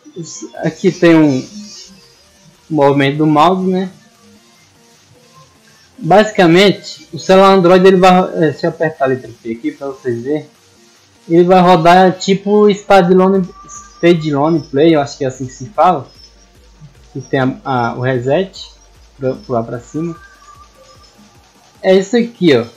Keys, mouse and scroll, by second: 0.6 middle click, 3.5 middle click, 5.0-6.4 drag, 7.1 scroll up 2, 11.5 click, 12.1 click, 13.3 click, 14.6 click, 15.6 click, 17.2 click, 17.7 click, 19.2 click, 19.8 click, 20.0 click, 20.2 click.